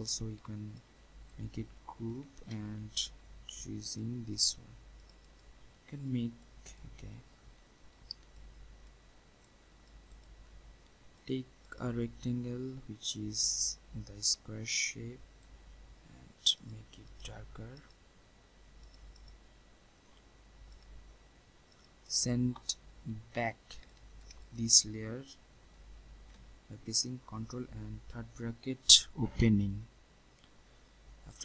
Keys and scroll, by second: 2.2 ctrl+g, 26.0 ctrl+shift+[.